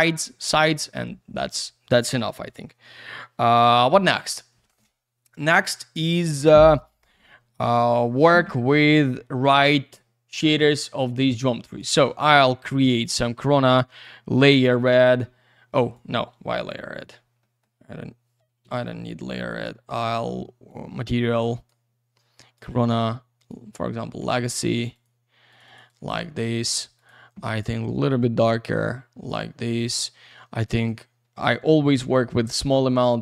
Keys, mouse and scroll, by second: 7.4 middle click, 7.6 alt+w, 8.8 middle click, 9.2 m, 10.5 click, 11.8 right click, 12.3 click, 14.0 click, 15.8 click, 17.4 middle click, 17.7 Delete, 18.8 ctrl+z, 19.3 click, 19.8 right click, 19.9 double right click, 20.7 click, 22.3 click, 23.4 click, 23.9 middle click, 24.9 click, 25.5 click, 25.9 click, 26.9 click, 28.2 click, 29.9 click, 30.6 click, 32.6 click.